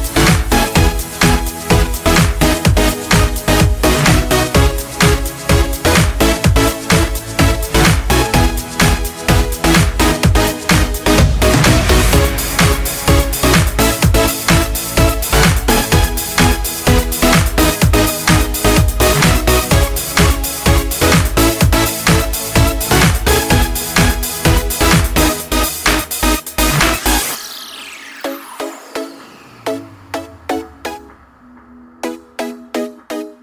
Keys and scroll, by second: 8.6-10.8 typing, 15.1 ctrl+z, 26.2-28.3 Right, 28.3 Down, 29.1 Right, 29.1 Down, 29.3 Right, 29.4 Right, 29.5 Right, 29.6 Right, 29.9 Right.